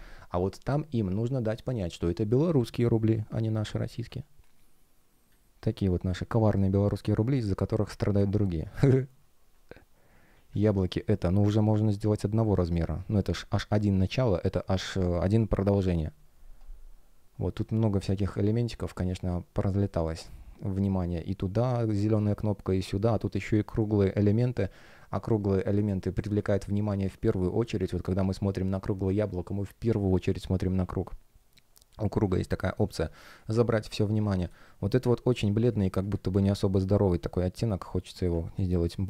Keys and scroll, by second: 3.9 space, 10.4 F1, 26.1 space, 30.7 space, 33.2 space.